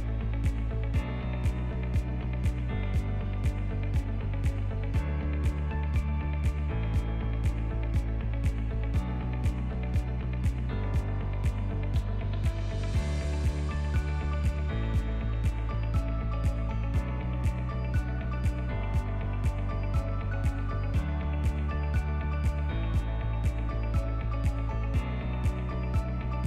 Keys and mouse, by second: 0.6 s, 2.2 click, 3.2 Delete, 4.2-7.3 drag, 7.9-10.5 drag, 14.2-18.7 drag, 15.0 KP_Decimal, 20.9-24.5 shift+drag, 25.0 click, 25.4 shift+middle click, 26.3 click.